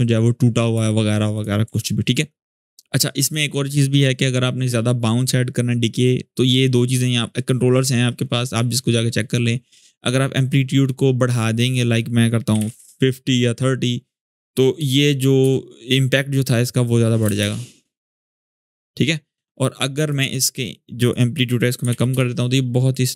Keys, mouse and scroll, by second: 0.0-0.6 drag, 1.1 click, 1.5 alt+scroll up 1, 3.0 click, 10.3-11.4 scroll up 1, 11.4 click, 12.0-12.8 typing, 15.2 Return, 16.4-17.0 click, 17.0 space, 19.2-20.0 drag, 21.3-22.1 typing, 23.1 click.